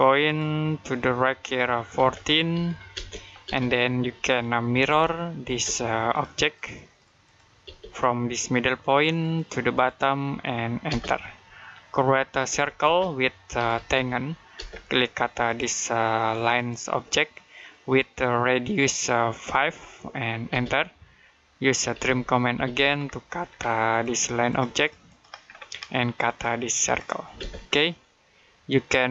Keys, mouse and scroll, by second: 0.1 click, 1.8-2.8 typing, 3.5-3.9 scroll down 1, 3.9 middle click, 4.3-5.3 typing, 5.9 click, 9.0 click, 10.7 space, 11.2 middle click, 12.3-14.4 typing, 15.3 click, 19.3 5, 20.3 space, 21.5-22.4 typing, 22.9 scroll down 1, 23.1 middle click, 23.7 click, 25.3-26.1 scroll up 1, 26.1 click, 27.2 space, 27.5-27.8 scroll down 1, 27.8 middle click.